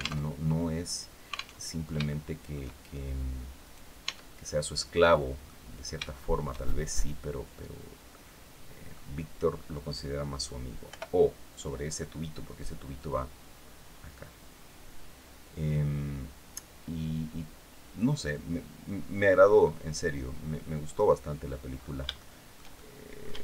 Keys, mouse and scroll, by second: 1.3 alt+Tab, 1.7 shift+middle click, 3.3 right click, 3.7 Tab, 4.1-5.3 middle drag, 5.7-8.8 shift+middle drag, 10.5 o, 12.6 click, 13.5-14.1 scroll down 2, 14.2-15.6 scroll down 8, 17.6-18.1 scroll down 4, 19.4 scroll up 2, 21.4-21.8 scroll up 3, 21.8-23.1 shift+middle drag, 23.2 shift+middle click.